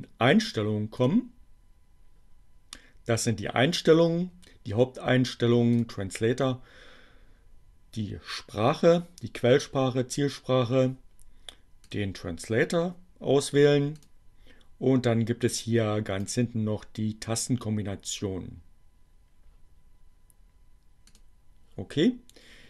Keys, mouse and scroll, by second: 4.8-5.9 drag, 11.9 click, 12.3 click, 14.7-16.5 drag, 20.2-21.5 drag.